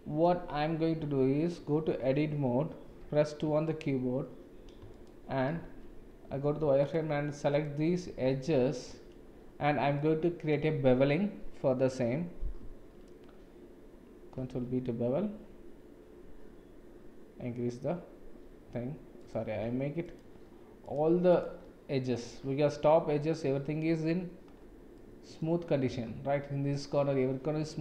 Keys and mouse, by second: 1.6 Tab, 3.0 2, 3.8 alt+click, 4.9 alt+shift+click, 5.6 alt+shift+z, 5.7 alt+shift+z, 6.3 shift+z, 6.8 alt+shift+click, 7.5 alt+shift+click, 8.5 shift+z, 10.0 middle click, 14.4 ctrl+b, 20.0 alt+shift+click, 21.4 alt+shift+click, 22.1 alt+shift+click, 25.0 middle click.